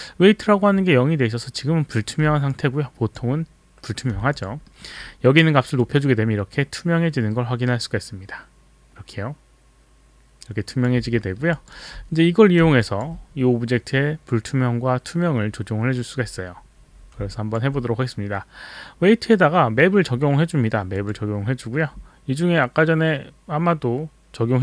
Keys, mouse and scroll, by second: 2.5 alt+click, 4.4 alt+click, 4.7 alt+middle click, 5.8 click, 11.1 alt+middle click, 11.6 alt+click, 11.8 alt+right click, 12.9 alt+click, 17.2 alt+click, 21.0 click.